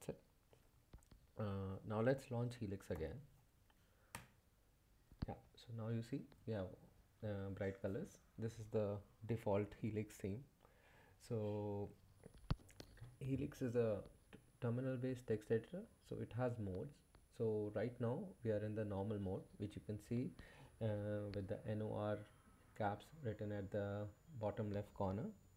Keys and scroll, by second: 2.7-3.5 typing, 4.1 Return.